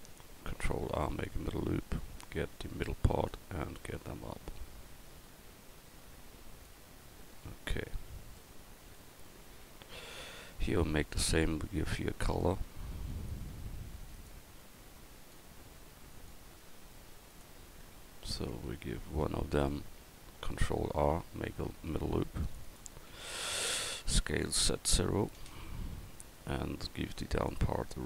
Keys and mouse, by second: 0.4 ctrl+r, 1.8-4.0 right drag, 2.9 click, 4.0 click, 7.5 a, 9.6 Tab, 11.4 Tab, 17.8 Tab, 18.5 Tab, 20.8 ctrl+r, 24.3 s, 27.4 click.